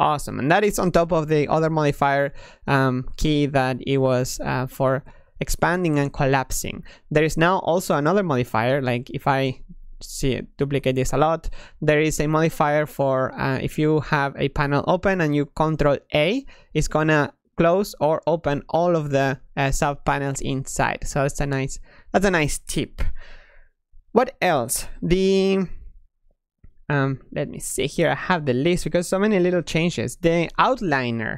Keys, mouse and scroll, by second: 4.3-6.6 typing, 8.7 shift+d, 9.1 shift+d, 9.5 shift+d, 9.7 shift+d, 12.7-15.8 drag, 16.0-20.2 ctrl+drag, 21.9-24.9 drag.